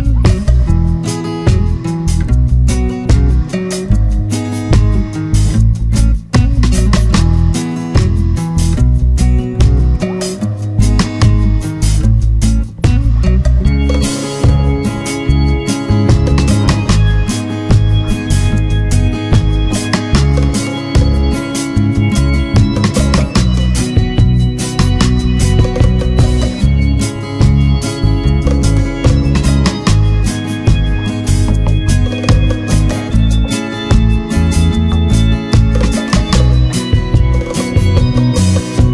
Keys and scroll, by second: 8.1 ctrl+z, 14.7 ctrl+z, 22.5 ctrl+-, 30.0 ctrl+-, 37.4 ctrl+=.